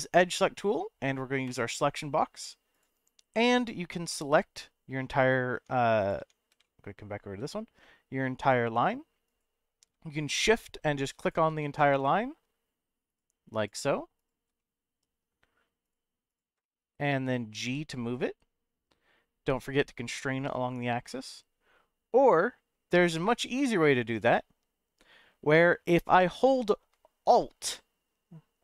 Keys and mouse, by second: 1.6 click, 2.7 click, 3.6 click, 4.1-5.2 middle drag, 5.5 Tab, 6.0 click, 6.2 Tab, 6.6 middle click, 8.4 click, 9.2 click, 10.3 shift+click, 11.2 shift+click, 11.6 middle click, 13.1 shift+click, 13.6 shift+click, 14.2 shift+click, 14.6 middle click, 15.8 shift+click, 16.6 middle click, 17.6 g, 19.6 x, 24.2 right click.